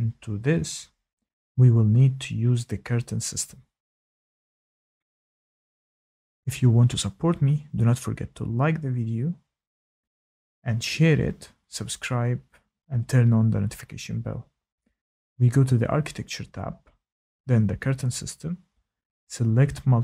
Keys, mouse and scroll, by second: 16.5 click, 18.5 click.